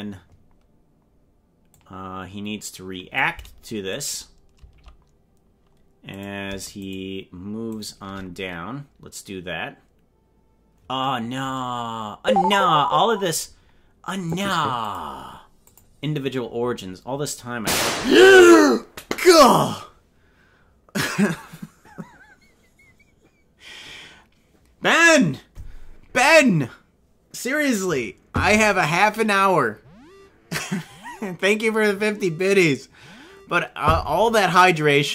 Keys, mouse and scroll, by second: 1.7-3.1 drag, 4.0 right click, 6.9 shift+right click, 7.7 right click, 14.2 click, 14.8 click, 17.8 click.